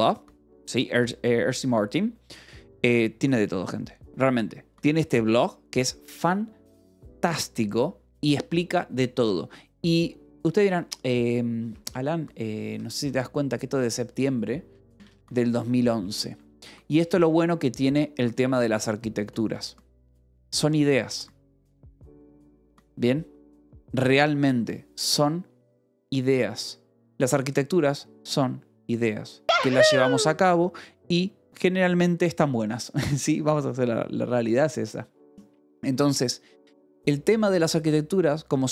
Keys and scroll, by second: 4.3-5.1 typing, 8.1 j, 10.4 /, 11.6-16.7 typing, 16.8 Return.